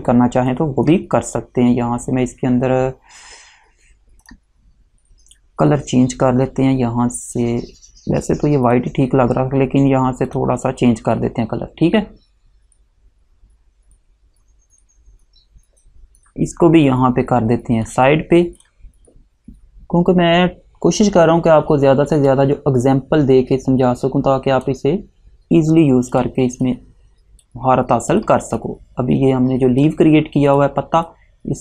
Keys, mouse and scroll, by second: 4.3 click, 8.8 click, 17.0 click, 21.2-21.7 alt+scroll down 1, 22.4 click.